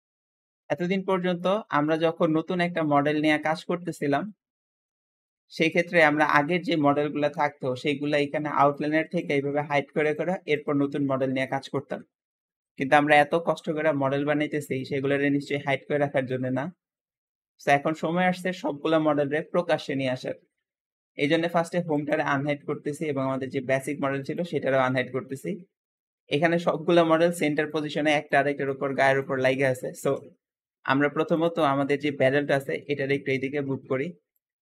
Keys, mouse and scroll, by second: 0.0 middle click, 0.5 scroll up 2, 0.6-8.5 middle drag, 8.5 shift+click, 9.1 shift+click, 9.9 click, 11.1-21.8 middle drag, 21.8 shift+click, 24.2-25.2 drag, 25.2-30.3 middle drag, 30.3 Escape, 30.4-31.2 scroll down 2, 31.2 click, 31.7-33.1 middle drag, 33.1 shift+click.